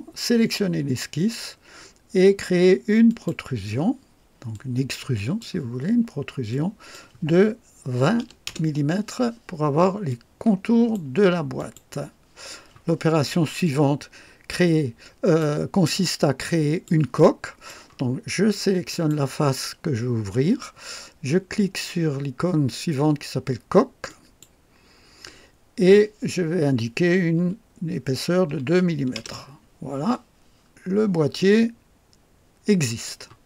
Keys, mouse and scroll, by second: 3.0 click, 4.4 click, 6.4 click, 7.9 KP_2, 8.1 KP_0, 8.4 Return, 10.0-11.0 drag, 11.5 click, 13.6-15.5 drag, 15.8 click, 17.1-17.8 drag, 18.8 click, 24.0 click, 28.4 KP_2, 29.1 Return, 30.6 scroll down 2, 31.3-33.2 drag.